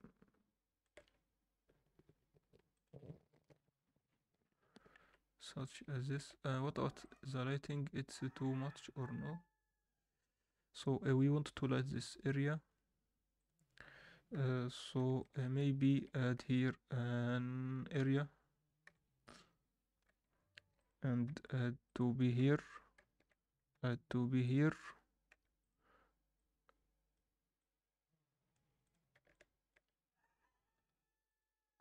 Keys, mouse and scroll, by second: 3.2 click, 5.0 alt+a, 5.7 alt+shift+middle click, 7.9 click, 13.5 click, 14.3 KP_7, 14.8 scroll down 1, 15.2 alt+shift+middle drag, 15.9 shift+right click, 16.4 shift+a, 18.8 KP_1, 20.0 g, 21.3 r, 22.3 KP_7, 23.7 r, 25.3 g, 26.3-29.1 drag, 30.7 r.